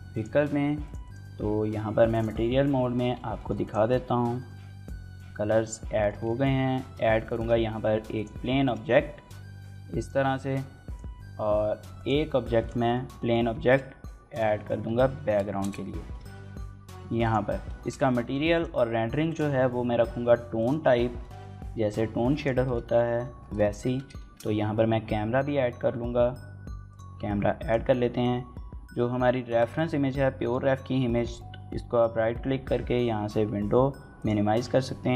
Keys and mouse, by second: 0.7 click, 2.0 drag, 3.2 shift+middle drag, 3.4 click, 4.2 shift+middle click, 4.4-5.4 middle drag, 5.8 shift+middle click, 6.0 middle drag, 6.7 shift+c, 7.0 shift+a, 8.4 shift+middle click, 8.7 s, 12.4 click, 12.4 s, 12.7 shift+middle click, 13.0 shift+middle click, 13.4 shift+a, 14.4 middle click, 14.6-16.7 typing, 15.4 KP_Enter, 17.0 click, 17.6 shift+middle click, 17.9 g, 18.3 click, 18.5 r, 19.1 click, 19.3 s, 20.4 click, 21.0 shift+middle click, 21.2 middle click, 22.2 click, 22.2 s, 22.5 shift+middle click, 22.7 middle click, 22.9 Tab, 23.4 shift+middle click, 23.7 Tab, 24.0 shift+a.